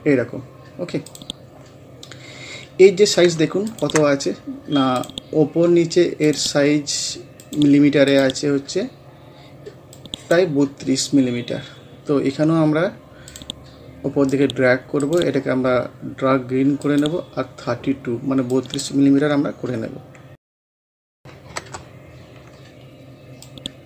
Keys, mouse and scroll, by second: 2.4 scroll up 1, 3.4 ctrl+scroll up 1, 3.7-11.5 ctrl+drag, 11.5 scroll down 1, 13.3 click, 15.0 right click, 16.8 click, 20.6 typing, 21.6 Return, 22.5 scroll up 1, 23.5-23.8 drag.